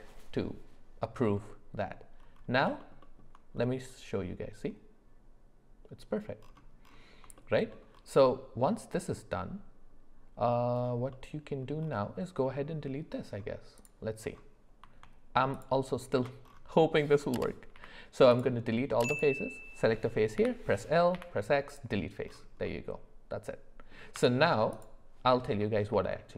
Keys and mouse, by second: 1.4 middle click, 2.8 alt+middle click, 3.0 alt+middle click, 7.4 shift+middle click, 11.1 middle click, 13.8 click, 17.7 x, 19.1 click, 20.4 l, 21.1 x, 22.6-23.9 middle drag, 24.1 Tab, 25.6 middle click, 26.0 shift+middle drag.